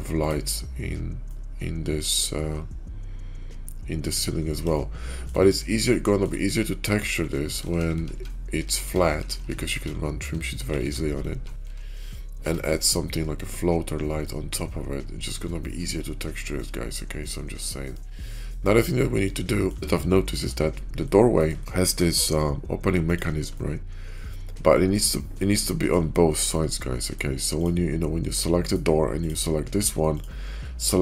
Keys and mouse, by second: 1.2-1.8 drag, 1.8-4.0 middle drag, 4.6-5.2 shift+middle drag, 5.7-6.2 shift+middle drag, 7.5 ctrl+z, 7.7 ctrl+z, 7.9 ctrl+z, 8.0 ctrl+z, 8.5 ctrl+z, 8.7 ctrl+z, 9.0 ctrl+z, 9.3 ctrl+z, 9.6 ctrl+z, 10.7 ctrl+z, 11.1 ctrl+z, 11.6 ctrl+z, 12.3 Tab, 14.2-17.5 middle drag, 17.8-18.2 shift+middle drag, 19.1-19.6 middle drag, 19.8 shift+middle click, 20.9-21.3 middle drag, 21.5 shift+middle click, 21.7 shift+middle click, 23.4-24.1 middle drag, 24.6 shift+middle drag, 25.2-25.8 middle drag, 26.0 shift+middle drag, 26.4-27.1 middle drag, 27.4 click, 28.2 middle click, 29.0 click.